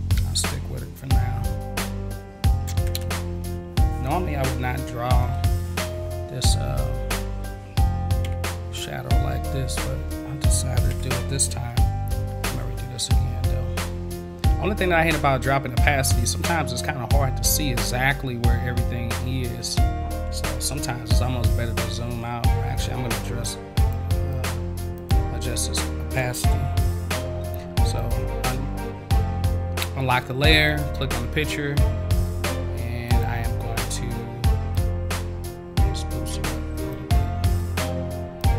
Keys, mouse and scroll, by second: 5.9 v, 7.2 click, 10.1 click, 23.7 click, 24.3 click, 25.0 click, 27.9 click, 30.7 click, 33.1 click, 34.7 click, 36.9 click, 38.4 click.